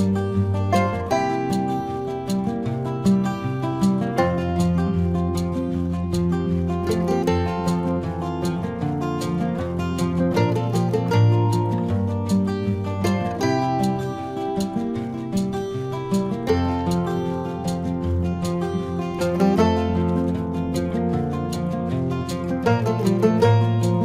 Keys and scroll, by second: 0.6 space, 1.7 space, 3.1 space, 4.9 space, 6.2 space, 7.6 space, 9.4 space, 11.0 space, 11.7 space, 12.1 space, 13.5 space, 14.4 space, 15.0 space, 16.4 space, 17.4 space, 17.9 space, 18.6 space, 19.0 space, 20.4 space, 21.3 space, 22.3 space, 23.5 space.